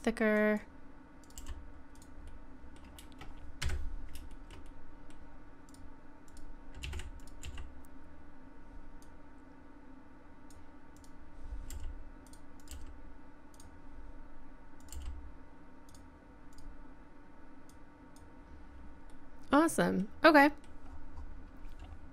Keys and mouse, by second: 1.4 g, 2.3 middle click, 2.6 middle click, 3.6 KP_Decimal, 4.9 middle click, 5.7 click, 6.8 z, 7.4 z, 11.0 right click, 11.7 g, 12.7 g, 14.9 g, 19.1-20.2 middle drag, 20.4 middle click, 20.5 middle click, 20.6 middle click, 20.9-22.1 middle drag.